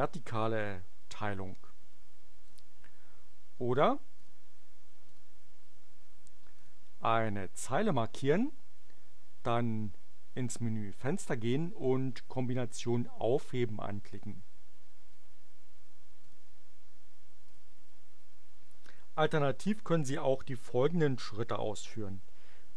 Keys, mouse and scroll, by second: 2.4 click, 4.1 click, 5.1 click, 6.5 click, 10.3 click, 14.2 click, 16.2 click, 17.4 click.